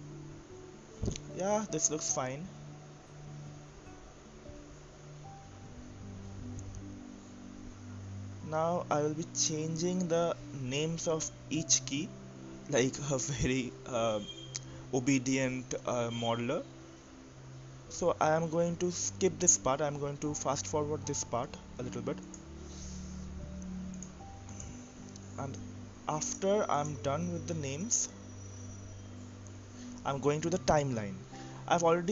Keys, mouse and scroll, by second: 1.5 Tab, 3.0-8.0 drag, 12.0 click, 12.1-15.3 drag, 18.2 e, 20.0 BackSpace, 20.5 BackSpace, 20.6 BackSpace, 22.1 e, 22.4 e, 22.5 click, 23.3 t, 24.2 click, 26.8 click, 27.9 click, 29.7-32.1 drag.